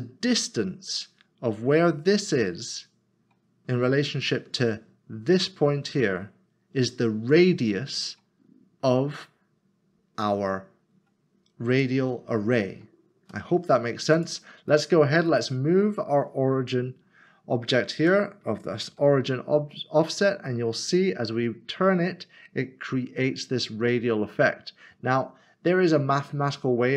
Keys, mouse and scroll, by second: 11.8 middle click, 14.2 click, 18.0 r, 18.9 z.